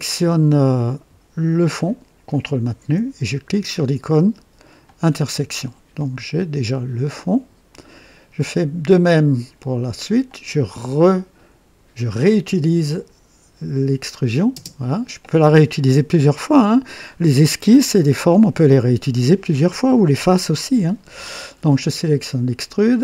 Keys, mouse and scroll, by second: 2.2 ctrl+click, 4.7 click, 5.9-7.9 drag, 10.2 click, 12.8 click, 14.4 space.